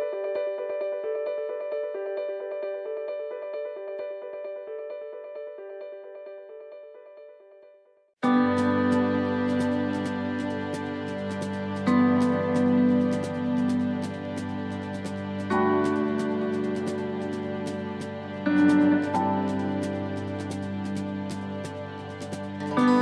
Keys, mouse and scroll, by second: 5.4 ctrl+r, 7.7 middle click, 8.1 scroll up 1, 8.6 shift+middle click, 9.4 ctrl+r, 11.6 ctrl+r, 12.7 middle click, 13.4-13.7 scroll up 1, 14.1 middle click, 14.6 right click, 17.1 click, 17.9 right click, 19.9 click, 21.0 right click, 21.8 shift+right click, 22.9 right click.